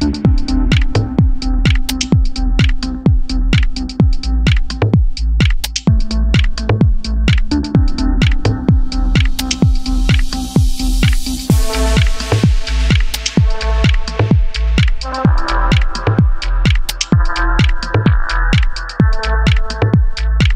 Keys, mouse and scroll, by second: 6.7 scroll down 1, 7.1-11.3 middle drag, 11.7 2, 11.7 click, 12.0 click, 12.5 middle click, 13.5 ctrl+click, 13.7-16.8 middle drag, 13.9 scroll down 1, 15.6 e, 16.8 click, 17.1 ctrl+z, 17.6-19.8 drag.